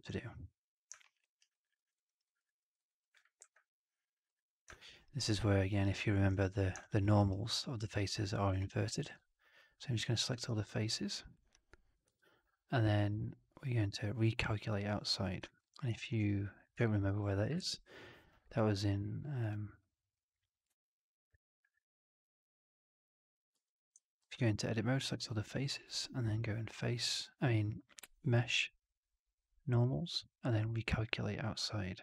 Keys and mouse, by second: 1.0 alt+middle drag, 1.1 alt+right drag, 1.4 alt+drag, 1.7 alt+middle drag, 1.9 alt+right drag, 2.1 alt+right drag, 2.3 alt+click, 2.5 alt+middle drag, 2.7 alt+right drag, 3.0 alt+click, 3.3 alt+v, 4.6 middle drag, 4.8 right click, 5.2-5.5 drag, 5.6 right drag, 5.9 drag, 6.7 alt+drag, 6.9 alt+middle drag, 7.1 alt+right click, 7.3 alt+click, 7.7 alt+middle drag, 8.5 2, 9.0 ctrl+a, 10.4 w, 12.0 shift+Tab, 15.4 alt+click, 16.2-16.6 drag, 16.8 shift+x, 17.5 shift+x, 20.5-23.4 drag, 23.5 3, 24.2 ctrl+a, 27.3-32.0 drag.